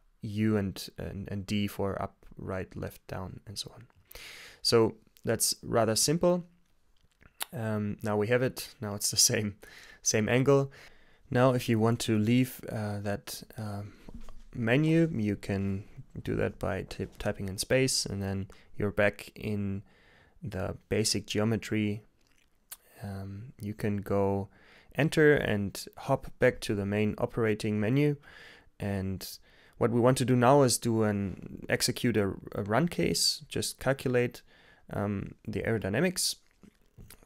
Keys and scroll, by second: 0.0-4.0 typing, 7.0 typing, 15.4 space, 20.8 Return, 23.7 Return, 31.7 x, 33.2 Return.